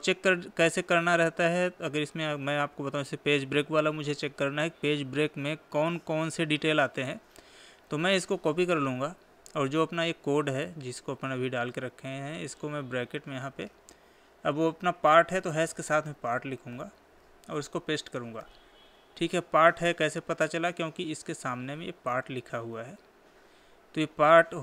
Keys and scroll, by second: 8.4 ctrl+c, 18.0 ctrl+v.